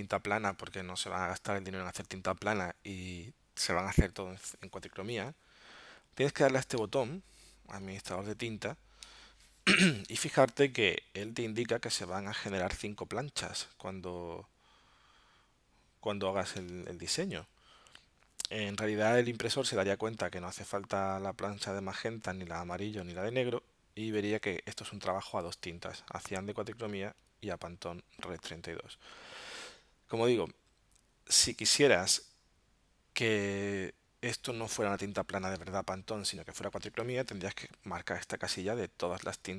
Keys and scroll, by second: 6.8 alt+super+0, 9.2 alt+super+-, 10.0 alt+super+0, 16.7 alt+super+-, 35.6 alt+super+0, 39.4 alt+super+-.